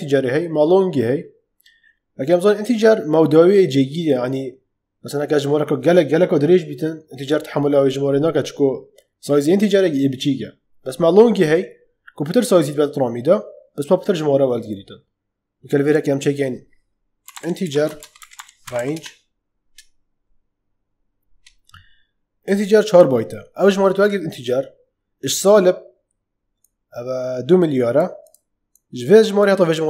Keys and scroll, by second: 16.9-19.2 typing.